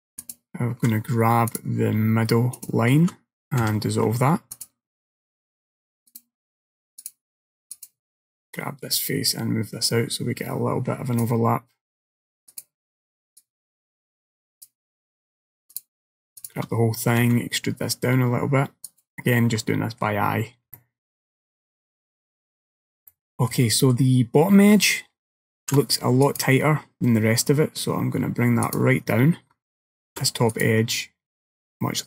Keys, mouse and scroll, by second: 0.3 alt+click, 1.5 click, 2.6 alt+click, 3.7 x, 6.2 click, 7.1 click, 7.8 click, 8.6 click, 12.6 click, 13.5 click, 15.8 shift+click, 16.4 shift+click, 17.3 e, 19.4 middle click, 20.8 shift+middle click, 22.6-23.2 scroll up 2, 23.2 shift+middle click, 23.9 middle click, 25.7 ctrl+r, 30.1 ctrl+r.